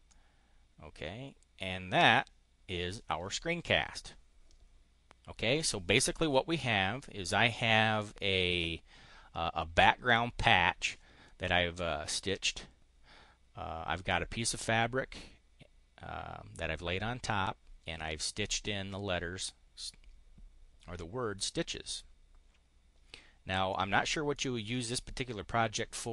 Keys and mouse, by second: 0.0-2.2 drag, 23.7 click.